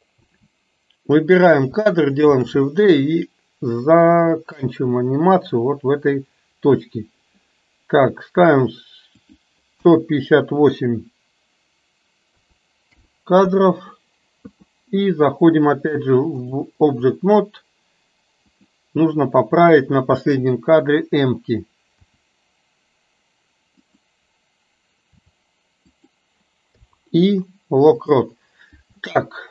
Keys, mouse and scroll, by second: 0.3 a, 2.4 shift+d, 5.6 click, 9.2-13.6 drag, 16.6-17.2 drag, 21.9 r, 25.2 r, 26.8 i, 29.1-29.5 middle drag.